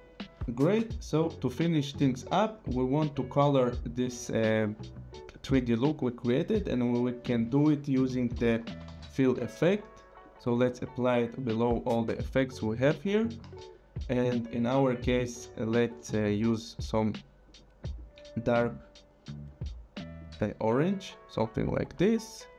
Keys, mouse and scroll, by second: 0.5 click, 2.0 scroll, 2.5 click, 2.9 click, 3.1 scroll, 3.3 click, 7.0 click, 8.0-9.4 typing, 10.2 click, 15.0 click, 16.8 click, 20.2 click.